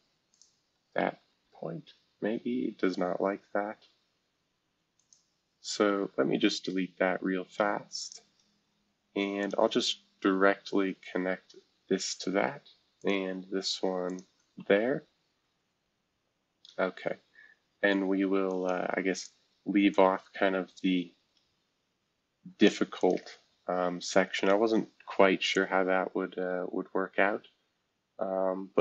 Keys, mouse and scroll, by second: 0.3 click, 1.3 ctrl+z, 5.0 click, 6.1 Delete, 8.0 click, 9.4 shift+click, 11.3 c, 13.0 click, 14.1 shift+click, 14.6 typing, 15.6-16.8 scroll down 7, 18.5 click, 19.1 click, 19.9-22.7 drag, 23.0 click, 23.4-25.5 scroll up 3, 26.2-27.3 scroll down 2, 27.3-28.8 scroll down 1.